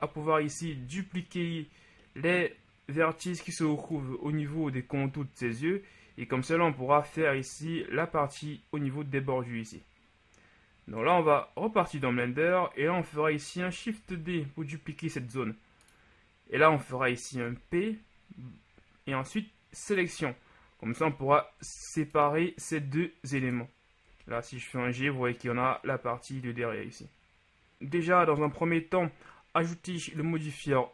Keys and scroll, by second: 0.1 KP_1, 0.7 z, 4.0 KP_1, 14.1 shift+d, 17.6 p, 21.8 Tab, 24.4 g.